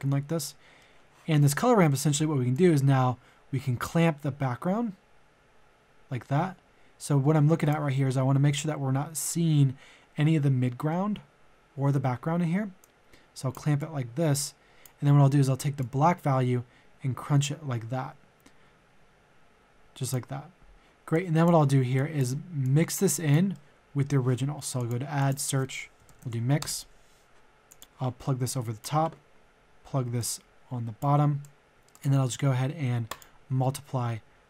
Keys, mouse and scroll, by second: 2.5-20.3 drag, 20.7 middle click, 21.1 click, 23.5-24.6 middle drag, 24.8 click, 26.0 typing, 26.6 Return, 27.7-31.8 drag, 31.8 middle click, 31.9 click.